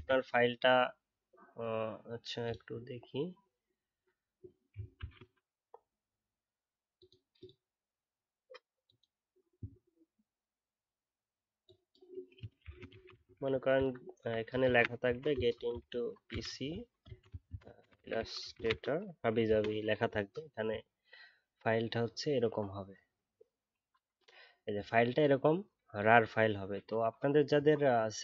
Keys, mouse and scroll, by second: 4.9 super+d, 12.6 shift+g.